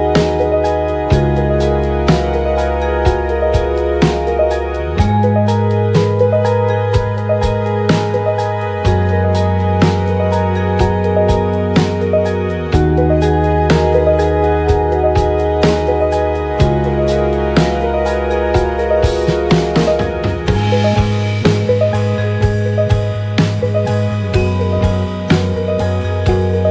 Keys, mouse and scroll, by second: 0.4-1.7 middle drag, 0.7 KP_1, 1.7 click, 2.1 middle click, 2.6-26.4 right drag, 4.2 click, 4.2 middle click, 6.2 KP_7, 6.4 shift+middle click, 6.6 click, 7.5-10.2 shift+drag, 9.8-20.6 middle drag, 11.8-13.2 drag, 13.8 g, 14.4 Tab, 16.9 Tab, 17.6 click, 18.9 g, 20.7 Tab, 21.5 click, 22.3 shift+d, 24.5 shift+r, 25.6 KP_3, 26.4 shift+middle click, 26.4 shift+z, 26.5-26.7 right drag.